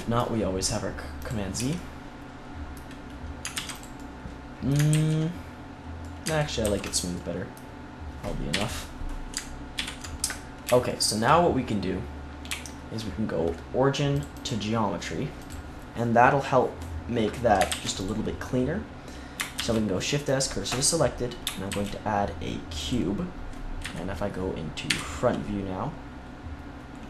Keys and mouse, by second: 1.1 click, 1.5 Tab, 3.5 ctrl+s, 4.8 ctrl+z, 6.6 ctrl+s, 8.4 KP_3, 14.1-15.4 right drag, 15.4 click, 17.6 ctrl+s, 19.5 shift+s, 21.6 shift+a, 23.7 KP_3, 24.8 KP_1.